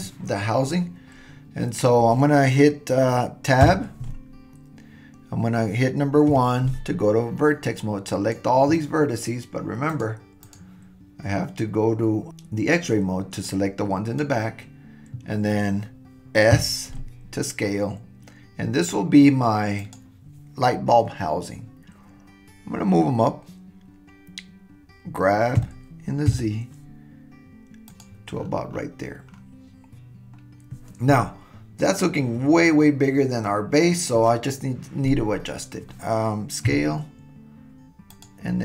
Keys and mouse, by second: 3.6 Tab, 6.3 1, 7.8-8.4 drag, 9.9 click, 10.4 click, 13.5-14.8 drag, 16.5 s, 25.6 g, 36.7 s.